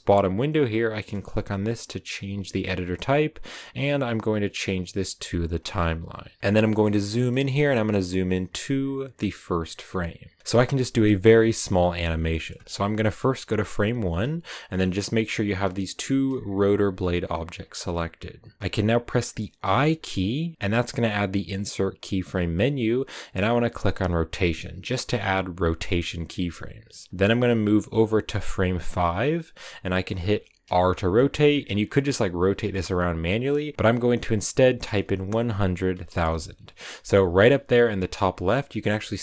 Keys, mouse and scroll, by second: 6.4 ctrl+w, 12.9-14.0 drag, 14.0-15.0 scroll down 1, 15.0 scroll down 1, 15.2-24.3 right drag, 27.3-30.7 drag, 30.7 r.